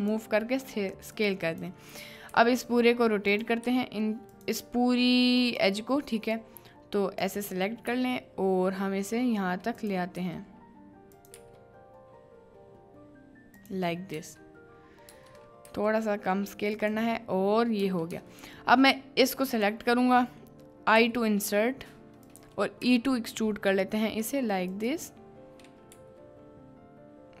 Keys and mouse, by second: 14.2 b, 15.2 b, 17.8 b, 18.5 b.